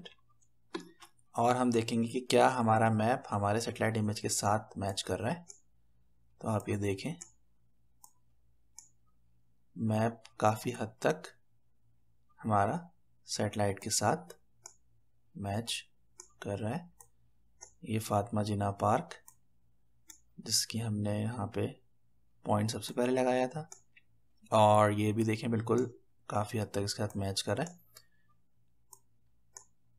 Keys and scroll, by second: 0.0-0.2 typing, 0.6 Return.